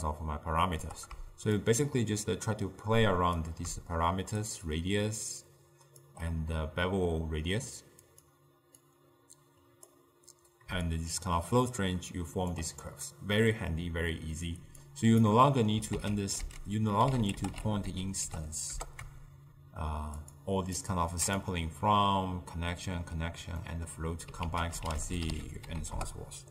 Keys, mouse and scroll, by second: 8.9 click, 11.0-14.0 shift+drag, 14.9 click, 15.5 middle click, 16.0 ctrl+a, 20.8-23.7 drag, 23.7-24.5 middle drag, 24.5 ctrl+a.